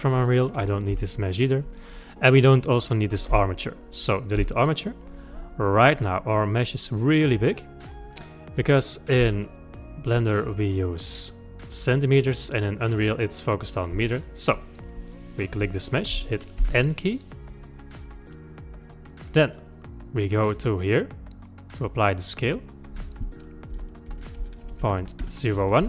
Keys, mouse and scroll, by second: 0.3 click, 0.9 Delete, 1.6-2.4 scroll up 5, 2.4 click, 4.4 Delete, 5.4-7.5 scroll down 22, 7.5-10.4 middle drag, 10.4-11.1 scroll up 3, 11.1-15.2 middle drag, 15.2 click, 16.6 n, 19.1 click, 22.4 click.